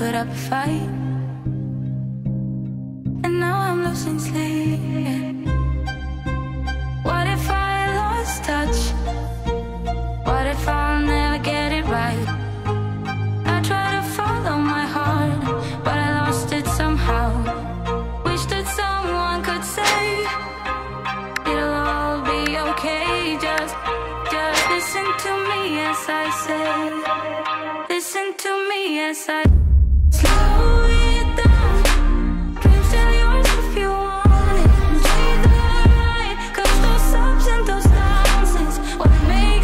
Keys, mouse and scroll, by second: 0.6 click, 1.9-2.6 typing, 4.1-5.7 click, 6.6 space, 9.8-11.0 drag, 17.4-18.3 typing, 19.5 shift+click, 20.1 ctrl+d, 21.9 click, 23.3-30.0 shift+drag, 36.1 click, 36.8 t, 37.7 click.